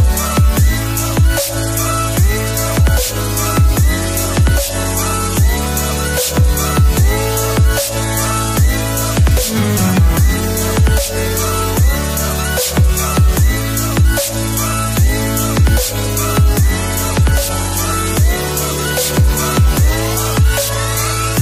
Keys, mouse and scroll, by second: 2.9 click, 5.5 click, 12.0 click, 17.0 click, 17.5-18.0 scroll up 1, 21.1-21.4 scroll up 1.